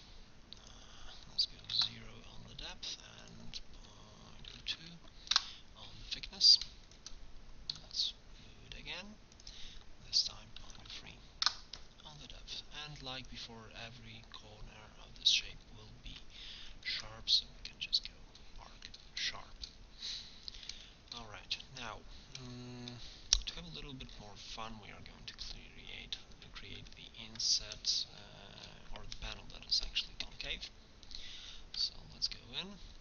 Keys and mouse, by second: 2.5 click, 3.3-5.2 drag, 6.5-8.9 drag, 7.8 i, 16.9 ctrl+e, 22.9 middle click, 24.9 KP_1, 25.5 KP_3, 26.8 ctrl+KP_3, 31.8 k.